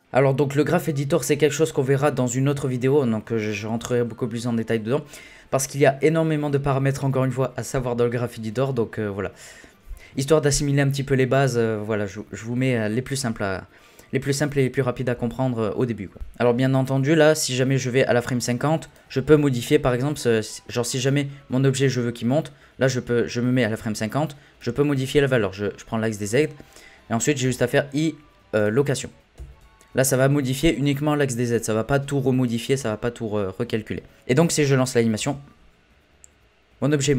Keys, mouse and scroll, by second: 16.1 click, 17.8-19.4 drag, 19.4 scroll down 4, 19.7 shift+middle click, 20.0-20.6 scroll up 1, 20.6 scroll up 2, 20.8-23.9 middle drag, 24.6 click, 27.4 i, 29.4 n, 34.4 click, 35.2 space.